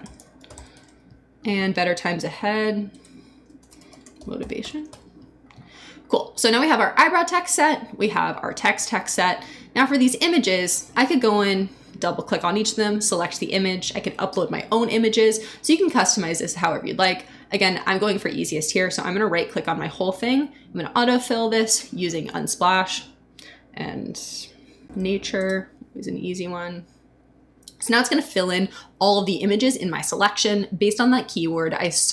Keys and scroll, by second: 0.0-1.2 typing, 1.7 super+s, 2.9 super+Return, 3.3-5.3 typing, 24.1-25.4 typing.